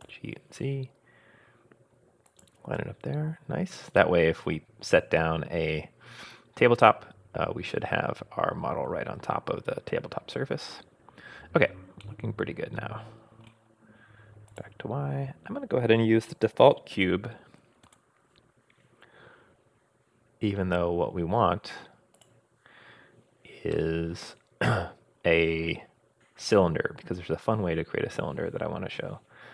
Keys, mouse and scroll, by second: 3.5-4.0 scroll up 2, 8.4-9.1 scroll down 2, 9.1-9.6 scroll down 2, 12.0-13.4 middle drag, 14.5 click, 17.8 shift+a, 23.7-27.1 middle drag, 27.3 scroll down 1, 27.6-28.5 scroll up 4.